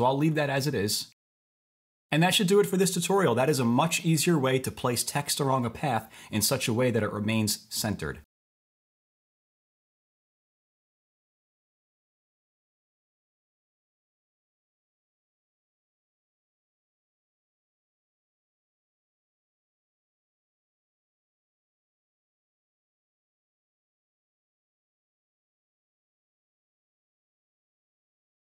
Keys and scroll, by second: 1.0-2.4 typing.